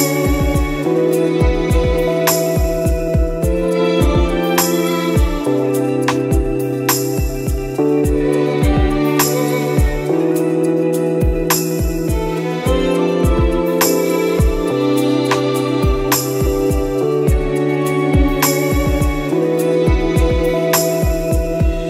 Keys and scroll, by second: 0.6 ctrl+z, 1.1 ctrl+z, 2.1 ctrl+z, 3.0 space, 5.7 space, 8.0 ctrl+z, 8.8 ctrl+z, 10.0 space, 11.3 space, 11.6 space, 11.8 space, 15.9 space, 16.5 ctrl+z, 17.5 space, 18.5 space, 21.8 ctrl+z.